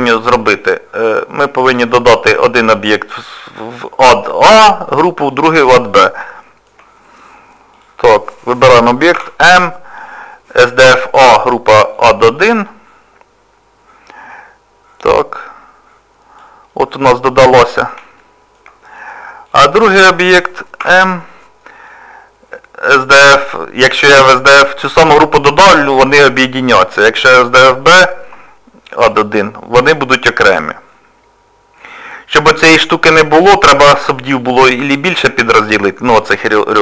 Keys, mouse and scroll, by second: 1.9 click, 5.4 click, 6.4 shift+middle click, 7.8 click, 9.2 m, 15.4 click, 16.7 middle click, 16.7 scroll up 1, 18.2 shift+middle click, 18.7-19.5 scroll up 1, 19.5 click, 20.8 m, 30.2 middle click, 36.3 middle click.